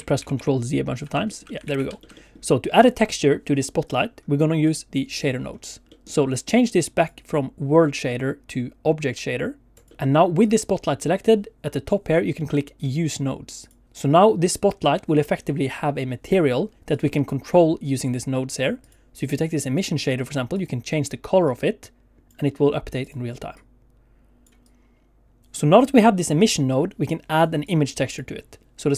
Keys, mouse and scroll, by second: 0.2 ctrl+z, 0.3 ctrl+z, 1.2 shift+middle click, 1.4 middle click, 1.7 alt+a, 2.0 shift+middle click, 2.1 middle click, 2.7 click, 4.6 click, 5.5-5.9 scroll down 1, 5.9 middle click, 6.9 click, 9.9 shift+middle click, 10.4 click, 13.6 click, 16.9 click, 17.2 click, 18.8 click, 19.2 click, 20.5 click, 23.0 click, 25.4 click, 27.6 click.